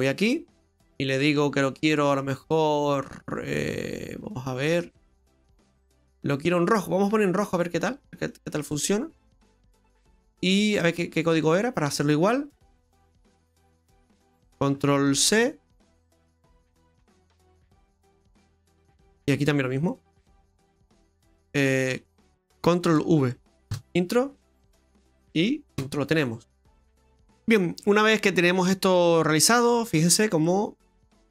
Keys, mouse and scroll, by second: 0.0 click, 1.1 click, 10.8 click, 11.3 click, 19.8 click, 20.7 click, 27.0 middle click, 27.0 scroll down 4, 27.8 middle click, 29.0 middle click, 29.8-30.5 scroll down 3, 30.5 middle click, 31.2-31.3 scroll up 6.